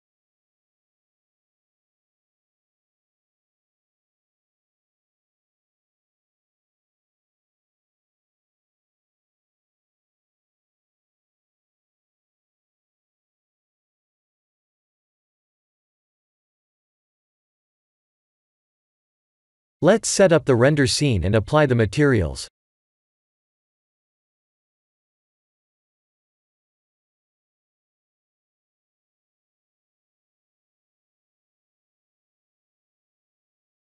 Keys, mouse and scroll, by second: 0.4 middle click, 0.5 middle click, 2.1 click, 3.5 middle click, 4.3-4.8 scroll down 6, 4.8 Tab, 5.7 scroll down 2, 6.2 middle click, 10.3 middle click, 10.4 middle click, 14.4 middle click, 14.7 middle click, 16.7 shift+middle click, 17.2 middle click, 17.7 scroll up 2, 18.3 shift+middle click, 18.3 scroll up 1, 19.8 middle click, 20.8 ctrl+alt+KP_0, 21.4 shift+`, 25.4 click, 28.3 click, 29.9 click, 32.4 click, 33.6 scroll up 4.